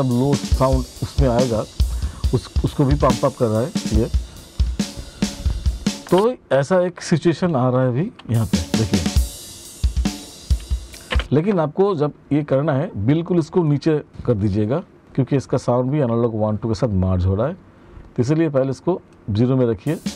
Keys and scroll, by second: 5.6 space, 7.7 space, 10.6 space, 19.3 space.